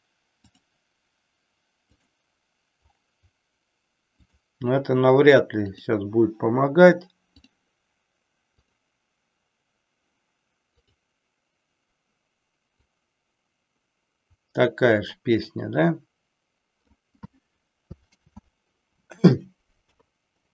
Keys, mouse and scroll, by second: 0.5-2.3 drag, 4.2 click, 5.5-7.5 drag, 8.5 click, 10.8 click, 12.9-17.0 drag, 18.2 ctrl+z, 19.8 KP_3.